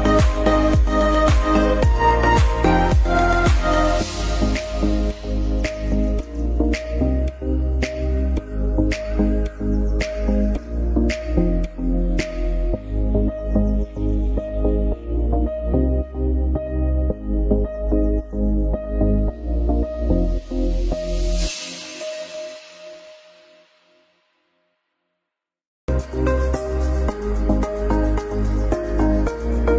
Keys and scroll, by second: 4.5 F4, 6.4 F2, 12.8 F3, 13.0 F2, 16.9 F4, 17.5 ctrl+r, 19.6 F2, 27.2 F4, 29.2 shift+Page_Up.